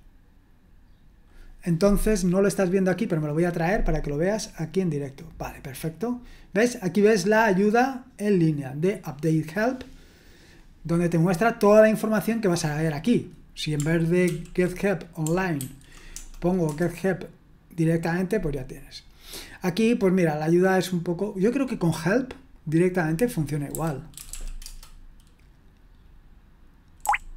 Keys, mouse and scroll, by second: 3.3-5.7 drag, 7.0-8.6 scroll down 1, 10.4-11.2 scroll down 1, 11.2-12.5 scroll up 1, 12.5 click, 14.2 ctrl+p, 15.6 ctrl+w, 16.1 BackSpace, 16.7 Return, 23.5-24.8 typing, 27.0 typing.